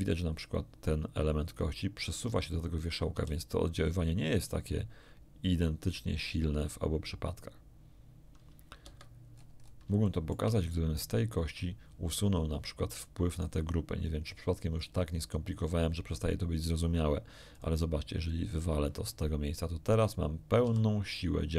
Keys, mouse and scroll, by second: 0.1 click, 3.1 r, 8.8 Escape, 9.3-9.9 scroll down 2, 10.0 shift+middle click, 10.6 shift+right click, 13.3 right click, 14.7 click, 17.5 click, 18.5 click, 20.0 right click, 20.6 r.